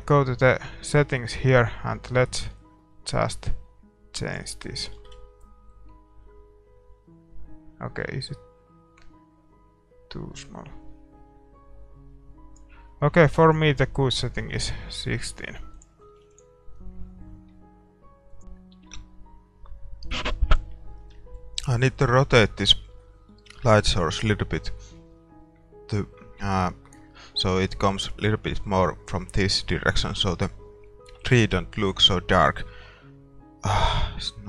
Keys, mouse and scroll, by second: 1.8-3.6 drag, 5.1 shift+z, 8.3-10.0 drag, 13.1-15.0 drag, 14.2 ctrl+s, 14.2-16.6 middle drag, 15.9-18.2 drag, 16.6 ctrl+s, 18.4-34.4 middle drag, 18.4 shift+z.